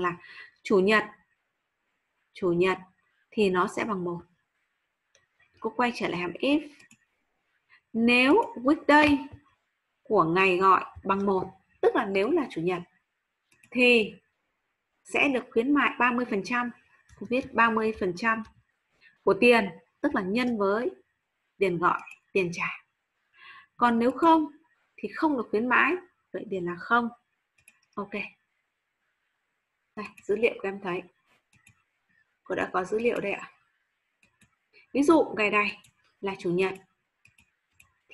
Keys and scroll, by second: 18.4 shift+5.